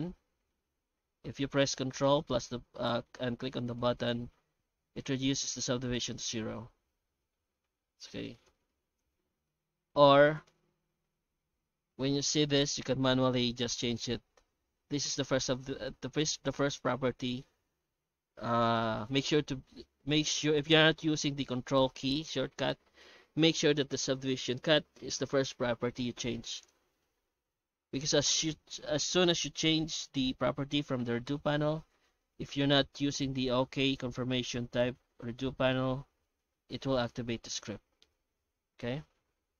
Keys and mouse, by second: 0.8 shift+q, 7.0 shift+q, 9.8 shift+q.